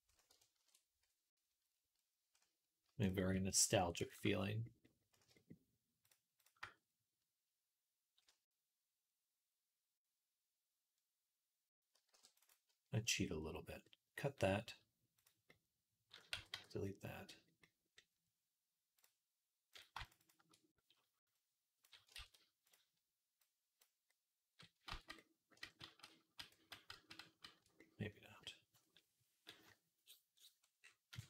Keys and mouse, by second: 0.4 ctrl+KP_Add, 4.3-16.8 middle drag, 11.9 ctrl+r, 15.0-16.2 drag, 16.2 x, 16.9 middle click, 17.4 click, 17.5-18.8 middle drag, 18.8 click, 19.6 middle click, 20.0 alt+shift+click, 20.3 middle click, 21.2-22.5 drag, 22.0 ctrl+z, 22.5 middle click, 23.3-29.2 drag, 24.7 ctrl+z, 26.0 ctrl+z, 26.8 ctrl+z, 27.1 ctrl+z, 30.1-31.2 drag, 31.1 Tab.